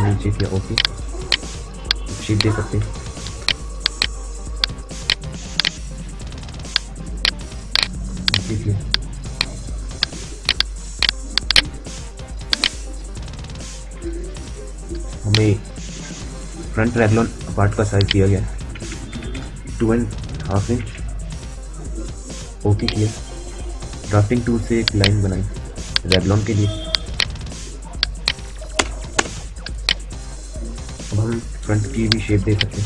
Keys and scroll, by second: 2.4 q, 13.6 a, 18.5 BackSpace, 20.0-21.1 typing, 23.7 d, 28.5 Return, 31.2 q.